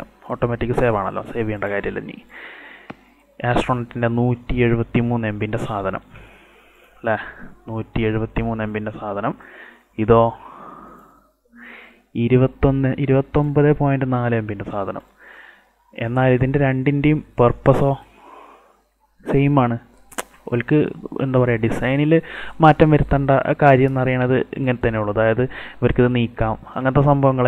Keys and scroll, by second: 17.2 space, 26.3 ctrl+alt+z.